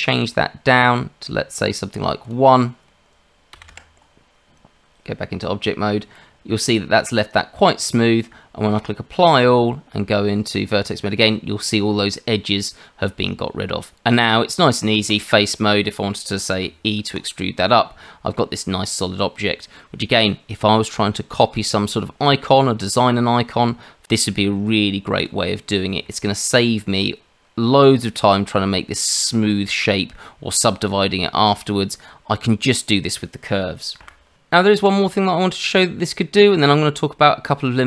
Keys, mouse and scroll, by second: 2.2 click, 4.3 Tab, 8.8 click, 9.4 Tab, 14.1 Tab, 15.1 click, 15.4 middle click, 16.5 e, 17.5 middle click, 18.6 scroll down 1, 18.8 middle click, 23.6 Tab, 25.2 click, 25.7 scroll down 1, 26.0 shift+middle click, 26.3-28.6 scroll down 1, 34.0 Delete, 34.3 shift+a, 34.7 shift+a.